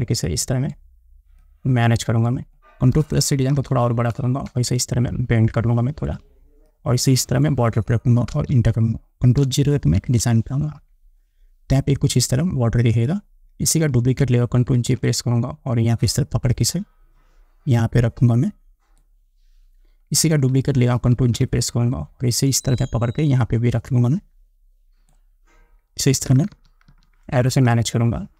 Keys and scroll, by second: 3.8 ctrl+=, 8.6 Return, 10.2 ctrl+0, 15.0 ctrl+j, 21.4 ctrl+j, 26.5 Up.